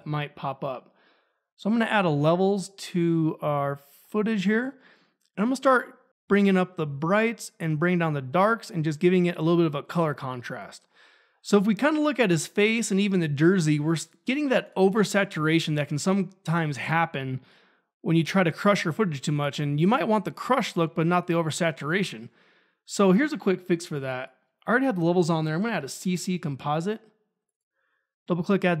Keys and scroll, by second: 0.0-0.4 typing, 25.3-26.7 typing.